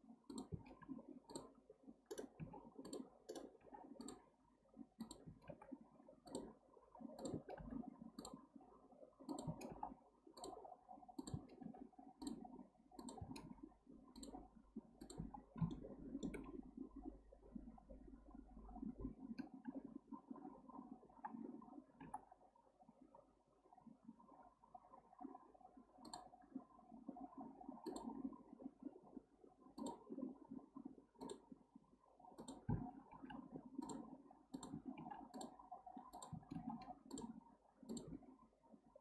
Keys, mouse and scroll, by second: 0.8 k, 3.6 k, 5.5 k, 11.6 k, 15.7-18.8 shift+middle drag, 35.0 k.